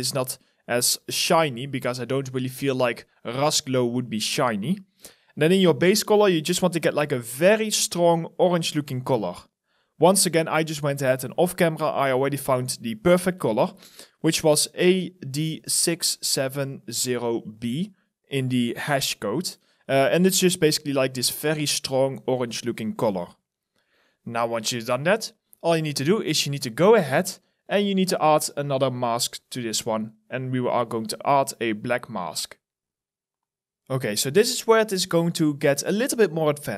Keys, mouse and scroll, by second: 12.5 ctrl+v, 20.9 alt+click, 22.3 alt+right click, 23.0 alt+click, 35.8 alt+right click.